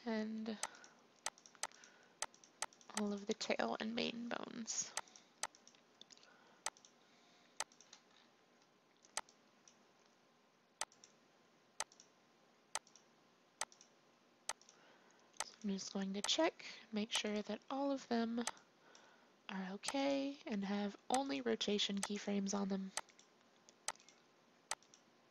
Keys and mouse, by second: 2.2-3.9 drag, 3.9 Delete.